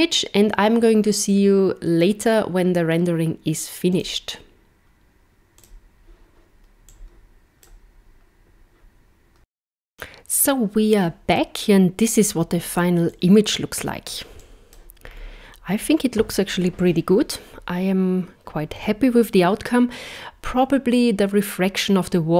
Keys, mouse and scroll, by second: 3.9 click.